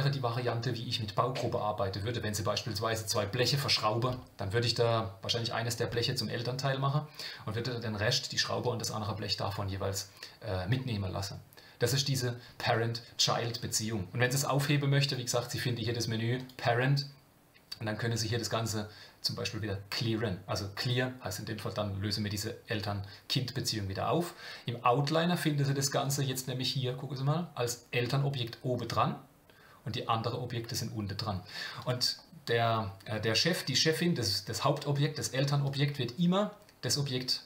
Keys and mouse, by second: 15.0-24.2 drag, 26.0 click, 35.6 click.